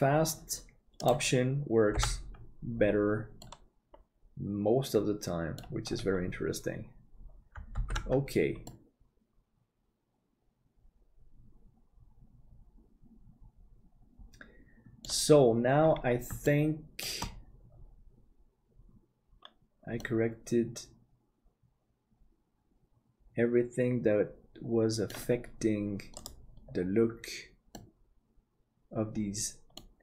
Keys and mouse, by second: 2.0 h, 3.4-5.6 middle drag, 8.0 ctrl+s, 8.6-15.0 middle drag, 16.5 shift+middle click, 20.0-25.1 middle drag, 27.7-29.8 middle drag.